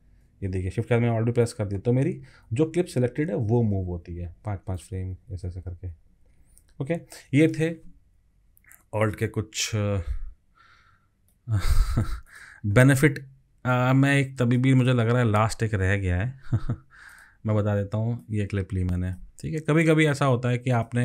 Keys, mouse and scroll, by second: 2.1 alt+shift+Left, 2.5 alt+shift+Left, 2.9 alt+shift+Left, 3.2 alt+shift+Left, 3.6 alt+shift+Right, 3.9 alt+shift+Right, 4.1 alt+shift+Right, 4.3 alt+shift+Right, 4.5 alt+shift+Right, 4.8 alt+shift+Left, 5.0 alt+shift+Left, 5.1 alt+shift+Left, 5.3 alt+shift+Left, 5.5 alt+shift+Left, 5.6 alt+shift+Left, 6.1 alt+shift+Right, 6.2 alt+shift+Right, 6.4 alt+shift+Right, 6.6 alt+shift+Right, 6.8 alt+shift+Right, 6.9 alt+shift+Right.